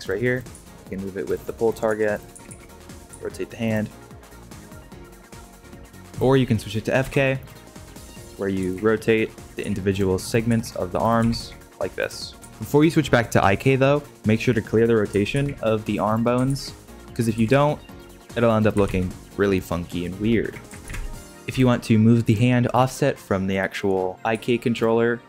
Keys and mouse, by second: 0.5 g, 1.7 drag, 1.9 g, 2.3 r, 3.1 r, 6.9 g, 8.1 click, 8.6 r, 9.5 r, 10.5 r, 11.1 r, 12.4 r, 15.3 alt+r, 16.5 alt+r, 17.3 r, 18.1 g, 18.8 alt+g, 20.9 ctrl+z, 21.5 g, 24.2 g.